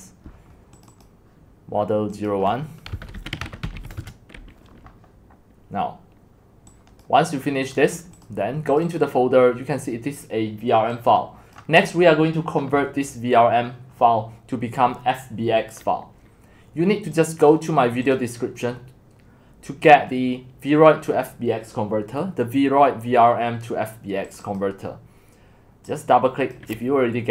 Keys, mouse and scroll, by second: 0.8 click, 2.1 click, 2.9-4.0 typing, 4.0 Return, 6.7 click, 6.9 typing, 7.8 click, 8.3 click, 8.8 click, 9.1 click, 10.9 click, 17.2 click, 24.4-27.3 drag.